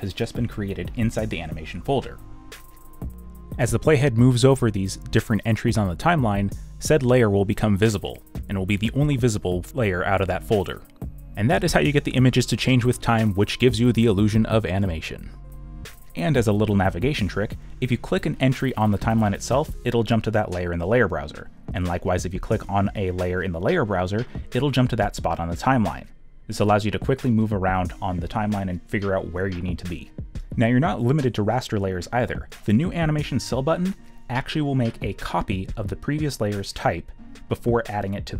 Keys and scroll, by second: 10.8 b, 11.9 ctrl+z.